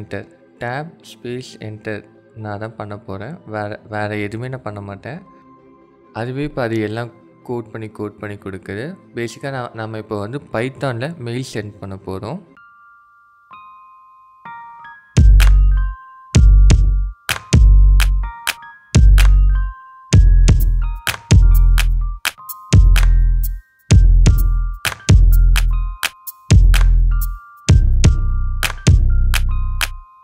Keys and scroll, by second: 0.2 Tab, 0.6 Tab, 1.9 Tab, 4.2 BackSpace, 5.1 Tab, 6.6 Tab, 7.9 Tab, 9.3 Tab, 12.1 BackSpace, 12.4 Tab, 14.2 Tab, 14.7 BackSpace, 15.9 Tab, 16.3 Tab, 16.9 BackSpace, 18.7 Tab, 20.7 Tab, 24.1 Tab, 24.4 BackSpace, 25.8 Tab, 27.5 Tab.